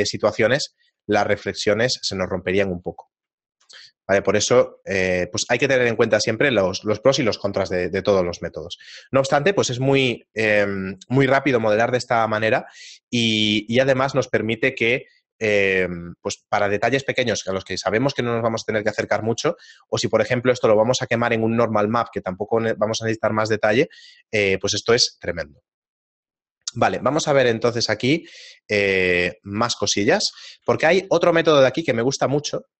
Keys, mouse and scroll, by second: 3.4 shift+middle click, 4.2 ctrl+middle click, 5.2 shift+middle click, 5.9 right click, 26.7 right click, 27.5 middle click, 28.7 right click, 28.9 x, 29.6 right click, 29.9 shift+middle click, 31.8 Tab, 31.8 shift+middle click.